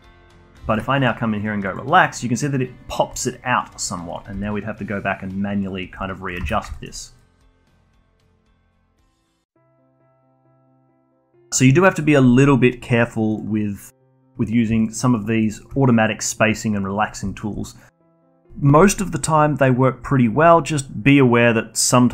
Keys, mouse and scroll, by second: 0.7-3.1 shift+right drag, 3.1-4.1 alt+drag, 4.3 g, 6.0 alt+click, 6.4 ctrl+z, 6.7 alt+middle click, 7.2 click, 7.3 g, 8.3 click, 8.4 g, 9.8-13.4 alt+drag, 14.8 shift+drag, 15.0 shift+drag, 15.1 shift+click, 15.4-17.1 shift+right drag, 17.3 alt+click.